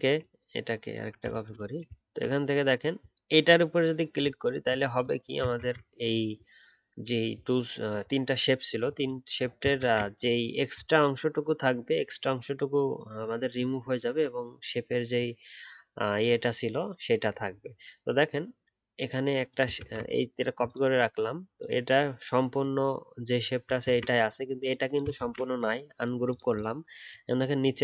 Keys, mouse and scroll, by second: 0.2 alt+click, 2.0-4.9 alt+scroll up 1, 5.5 ctrl+z, 9.8 ctrl+z, 19.8 ctrl+z, 23.8 ctrl+z, 25.1 ctrl+z.